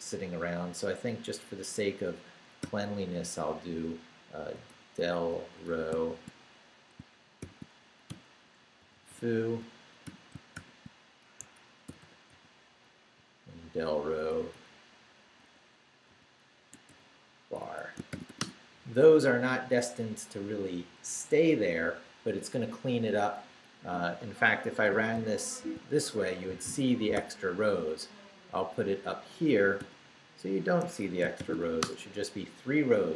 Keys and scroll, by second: 2.6 o, 4.2-6.2 typing, 7.4-10.6 typing, 11.4 shift+Escape, 11.9 y, 13.2 Right, 14.5 Right, 15.0-18.8 typing, 17.6 Escape, 23.6 Up, 24.5 Escape, 26.2 shift+Down, 26.7 Down, 27.1 d, 27.7 Up, 29.8 p, 30.8 Escape, 31.1-32.1 typing.